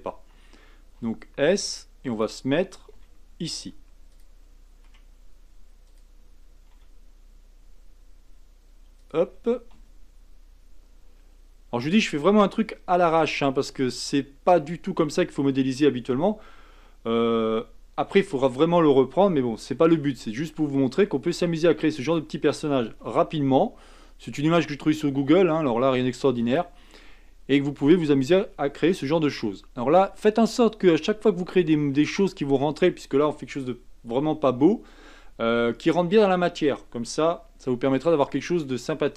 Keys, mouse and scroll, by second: 1.0 s, 2.9 g, 4.8 r, 6.7 g, 9.7 s, 13.0 g, 19.7 shift+d, 23.0 s, 27.6-28.5 scroll up 3, 28.5 scroll up 1, 28.9 shift+middle click, 29.7-32.3 scroll up 1, 38.0 shift+middle click, 38.9-39.1 scroll down 1.